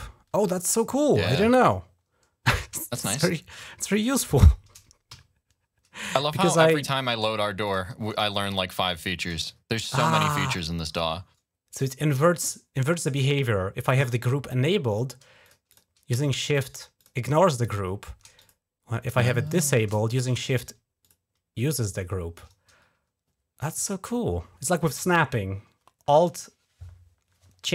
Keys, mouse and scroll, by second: 2.7 scroll down 1, 3.2 scroll down 1, 3.8 shift+click, 4.9 f, 5.8 click, 7.4 click, 8.2 shift+click, 8.8 shift+click, 9.2 click, 10.0 click, 10.4 click, 15.2 click, 15.5 click, 16.2 shift+click, 16.8 shift+click, 17.0 shift+click, 18.2 click, 19.3 click, 20.2 shift+click, 20.8 shift+click.